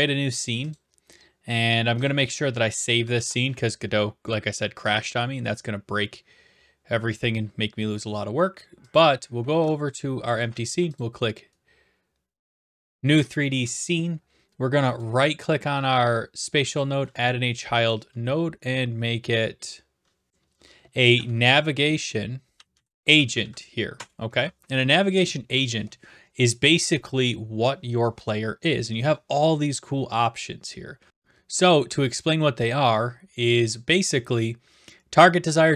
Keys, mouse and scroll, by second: 0.7 click, 2.7 click, 3.1 ctrl+s, 8.9 click, 10.9 click, 15.0 right click, 16.8 click, 20.9-22.5 typing, 22.7 Down, 22.9 Down, 23.0 Down, 23.4 Down, 23.9 Return.